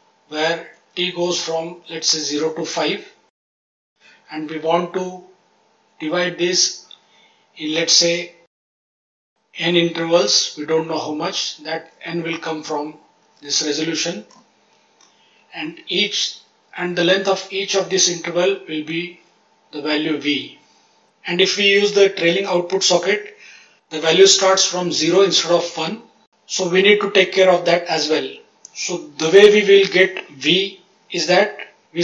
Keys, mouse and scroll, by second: 0.7 click, 2.1 click, 3.3 click, 3.5 click, 3.7 click, 9.6 click, 10.8 click, 11.7 click, 12.4 click, 13.1 click, 16.9-17.7 drag, 19.6-20.0 drag, 25.2-25.7 drag.